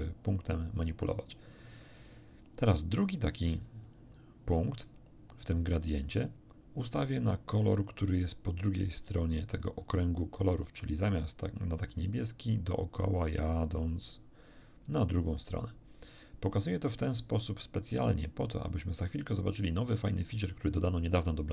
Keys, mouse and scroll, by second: 3.8 click, 4.5-6.4 drag, 9.8 click, 10.8-20.7 drag.